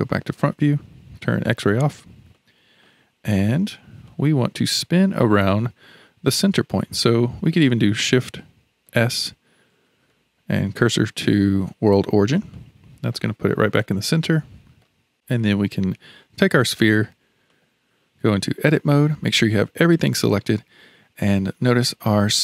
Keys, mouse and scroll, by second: 0.0 KP_1, 1.5 alt+z, 2.3-8.8 shift+middle drag, 8.8 shift+s, 9.9 shift+s, 12.5-15.0 middle drag, 15.0 scroll down 1, 16.7 click, 17.5 click, 18.4 Tab, 21.6-22.4 middle drag.